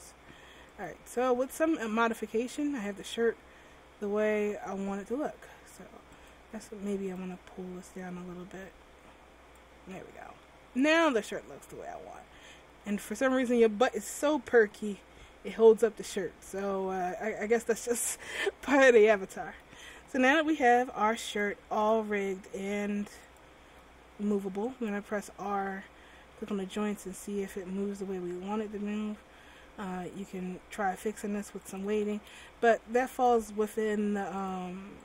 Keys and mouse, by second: 1.9-3.6 drag, 6.3 click, 9.8 click, 24.9 right click, 25.6 r, 32.0 a, 32.3 a, 32.5 alt+r, 33.8 r.